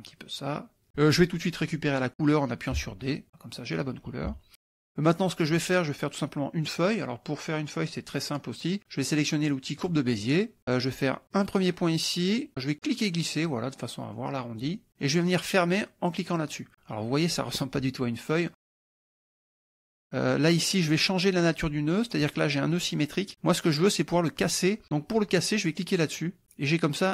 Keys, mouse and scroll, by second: 0.1 ctrl+click, 2.8 d, 3.1 click, 4.3 -, 4.9 middle click, 9.8 click, 10.2 middle click, 11.3 click, 12.9-14.8 drag, 16.3 click, 19.5 click, 20.6 click, 22.7 click, 26.1 click.